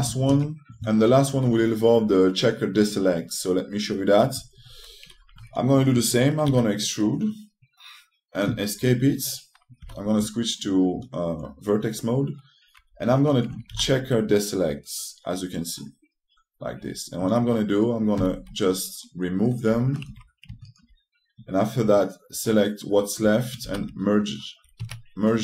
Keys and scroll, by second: 0.0-0.4 typing, 7.2 w, 10.5 3, 14.4 ctrl+t, 18.9 x, 20.4 2, 24.3 e.